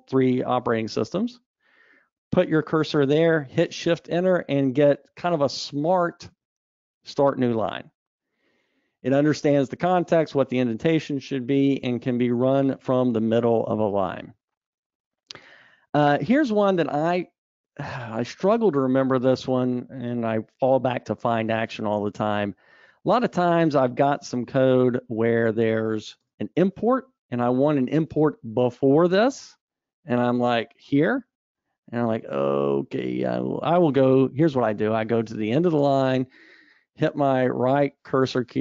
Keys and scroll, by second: 5.7 shift+Return, 16.5 super+z.